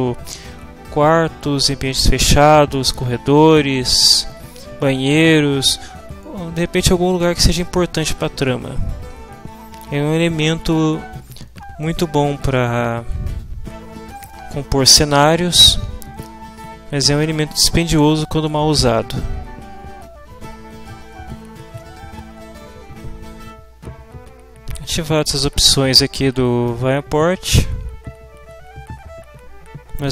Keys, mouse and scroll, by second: 26.6-27.8 drag.